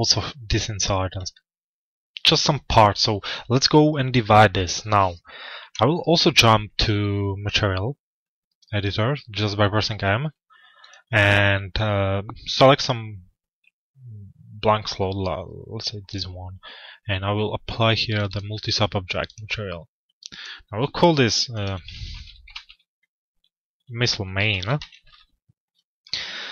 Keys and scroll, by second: 5.1 m, 24.6 Return.